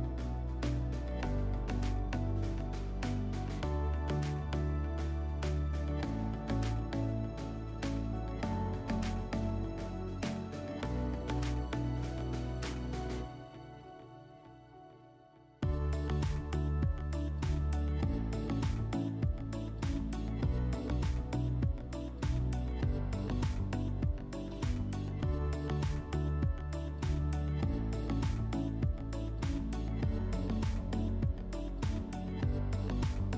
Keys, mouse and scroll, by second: 1.2 click, 3.4 click, 5.9 click, 6.7 click, 7.6 /, 10.2-11.7 drag, 13.1-14.7 drag, 15.3-16.8 drag, 21.4 click, 22.5 click, 23.6-25.6 drag, 26.0-29.3 drag, 31.1 click, 32.6 click, 32.6 click.